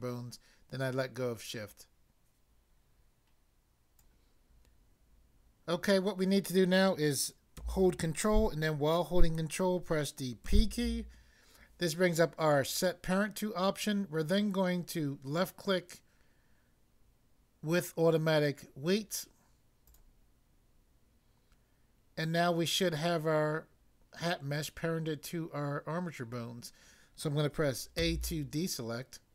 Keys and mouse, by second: 3.9 click, 10.4 ctrl+p, 19.9 click, 28.0 a.